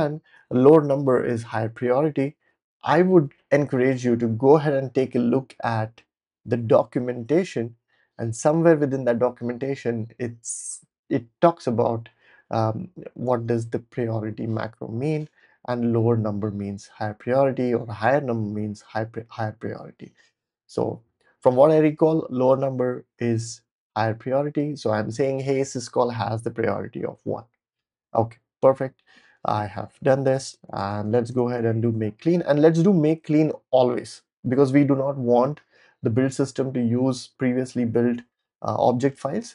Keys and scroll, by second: 30.2 ctrl+l, 30.3-32.0 typing, 33.2 typing.